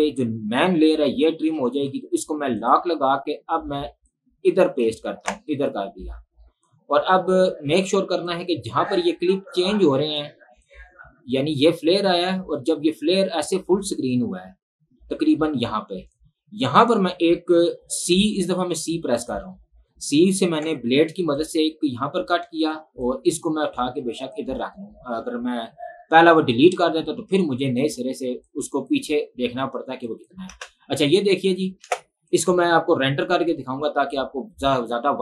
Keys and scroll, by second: 1.8 ctrl+z, 5.4 ctrl+v, 30.7 space, 32.1 space.